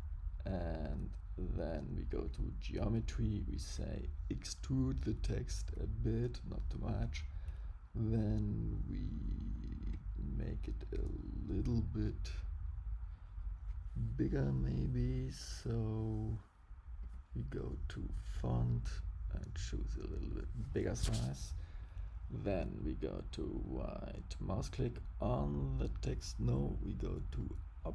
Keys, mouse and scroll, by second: 2.1 click, 3.7 click, 9.8 click, 17.0 click, 18.6 click, 23.0 right click, 27.3 click.